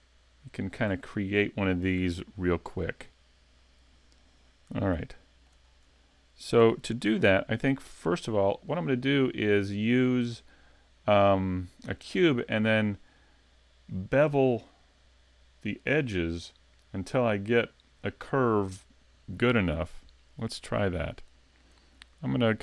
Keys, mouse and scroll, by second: 0.4-1.9 scroll down 1, 3.6 click, 5.0 shift+middle click, 5.7 scroll up 4, 6.0 shift+middle click, 7.1 s, 8.4 shift+middle click, 21.0 click.